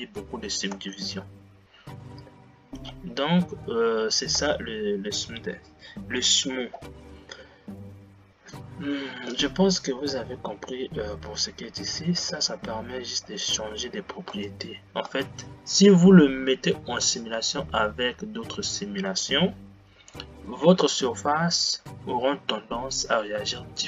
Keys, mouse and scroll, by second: 1.0 space, 4.9 space, 12.8-14.6 drag, 14.6 space, 15.5 space.